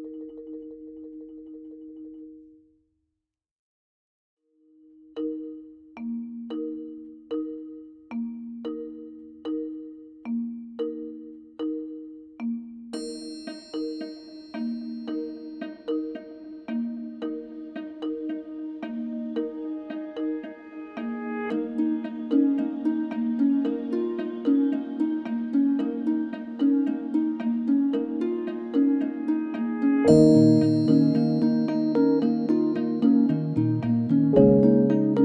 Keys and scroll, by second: 8.1 ctrl+z, 11.6 ctrl+z, 12.0 ctrl+z, 12.4 ctrl+z, 27.1 b.